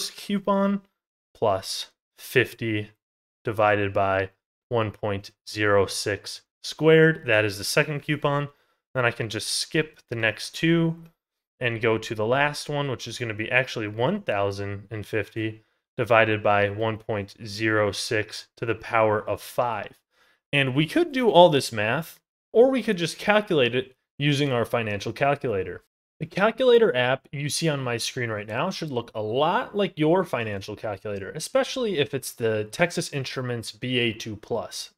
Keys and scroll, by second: 0.5 ctrl+z, 8.1 ctrl+z.